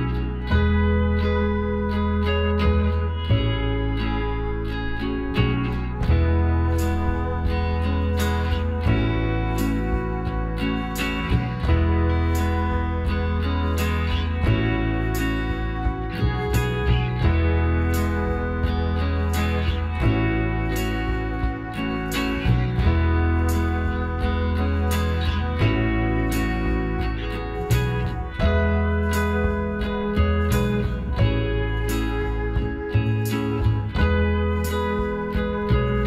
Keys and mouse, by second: 0.3 Tab, 1.1 a, 2.5 Tab, 13.6-15.7 middle drag, 13.6 a, 15.7 z, 16.3 z, 16.7 KP_Divide, 19.2 Tab, 19.7-21.5 middle drag, 20.9-22.8 drag, 21.8 a, 21.9 middle click, 22.7 a, 22.8-25.4 middle drag, 29.5 middle click, 30.7-32.4 right drag, 30.9 Tab, 32.7-34.4 drag, 33.3-36.0 right drag, 33.8 middle click.